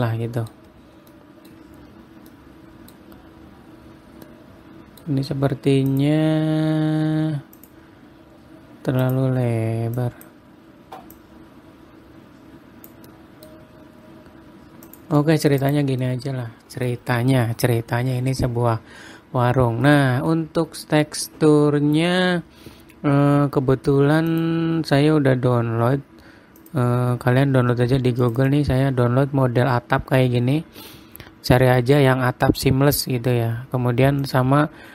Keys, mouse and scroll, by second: 1.3-1.6 scroll down 7, 1.6 middle click, 2.1-2.8 scroll up 4, 2.8 middle click, 3.5-4.1 scroll up 2, 4.1-4.5 scroll down 1, 4.9 middle click, 6.5 click, 8.1 click, 9.6 click, 10.5 click, 11.7 click, 13.6 middle click, 14.0-14.8 scroll up 2, 15.4 click, 15.7 middle click, 16.2 click, 16.5 middle click, 20.4 middle click, 21.8 middle click, 22.5-24.8 scroll down 1.